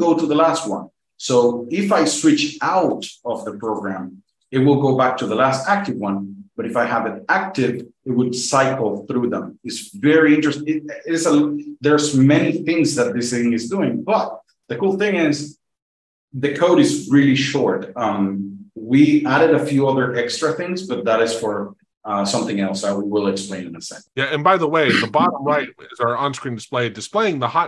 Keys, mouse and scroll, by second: 2.0 click, 2.8 F2, 3.6 click, 4.2 F2, 7.6 F2, 7.8 F2, 8.0-8.6 F2, 8.8 F2, 9.0-9.6 F2, 9.8 F2, 10.0 F2, 24.0 click.